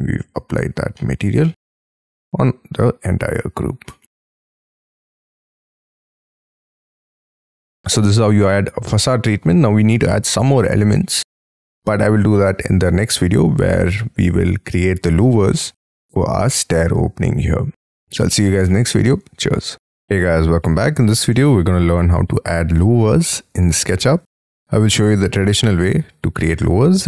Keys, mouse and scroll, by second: 0.3-0.9 scroll down 6, 0.4 space, 0.9 middle click, 1.4 middle click, 1.8 middle click, 4.2 shift+middle click, 4.4 scroll up 5, 4.7 shift+scroll down 4, 4.8 shift+middle click, 7.3 space, 8.0-8.7 scroll up 5, 8.8 middle click, 9.8 scroll up 4, 10.9-11.5 scroll down 12, 11.6 middle click, 12.1 scroll down 1, 12.4 middle click, 13.7-14.6 scroll up 5, 14.6 scroll up 4, 17.6 scroll down 4, 21.3 middle click, 21.9-22.4 scroll down 7, 22.4 scroll up 7, 22.7 middle click.